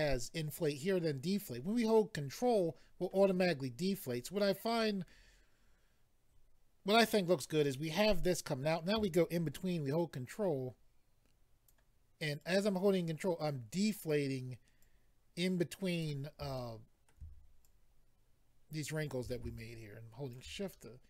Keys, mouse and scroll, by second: 4.8 middle click, 10.3 ctrl+click, 12.4 ctrl+click, 14.8 ctrl+click, 16.6 middle click, 17.6 ctrl+click, 19.6 shift+click, 20.7 middle click.